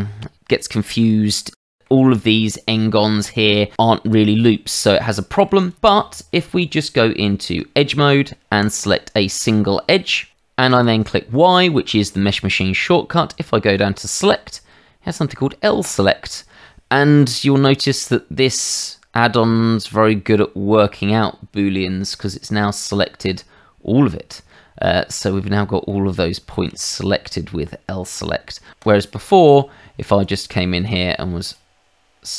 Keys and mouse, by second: 0.5 alt+click, 1.6 middle click, 2.0 shift+middle click, 2.8 middle click, 4.8 shift+middle click, 5.6 alt+click, 5.9 click, 6.6 Tab, 8.6 click, 10.7 y, 15.8 click, 18.4 middle click, 19.7 shift+middle click, 20.8 middle click, 22.1 shift+middle click, 22.8 middle click, 24.5 shift+middle click, 25.2 middle click, 26.2 shift+middle click, 26.8 middle click, 28.8 click, 30.2 click, 31.4 alt+click.